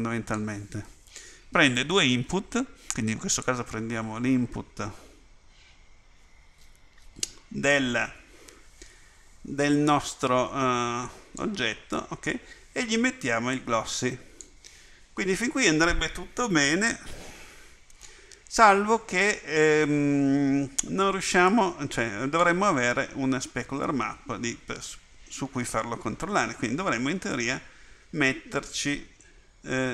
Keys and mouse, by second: 13.6 click, 27.5-29.9 drag.